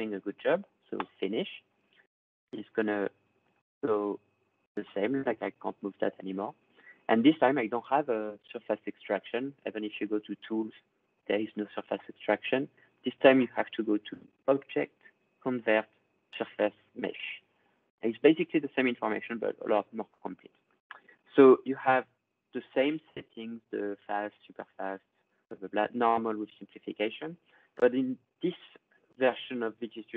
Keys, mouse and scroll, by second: 0.0 scroll, 0.8 click, 3.4 click, 5.7 click, 9.3 click, 11.1-14.4 drag, 16.4-17.9 drag, 21.3 click, 25.2-26.3 drag.